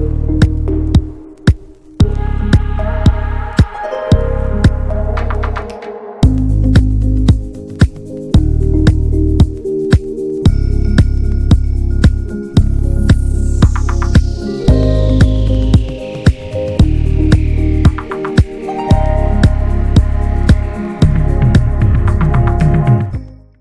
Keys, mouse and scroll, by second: 1.6-3.4 middle drag, 3.4-3.7 scroll up 1, 3.7-5.3 middle drag, 5.3 scroll down 1, 5.6-9.7 middle drag, 9.8-13.0 shift+middle drag, 16.0-18.0 drag, 18.2-21.0 middle drag, 21.7 ctrl+s.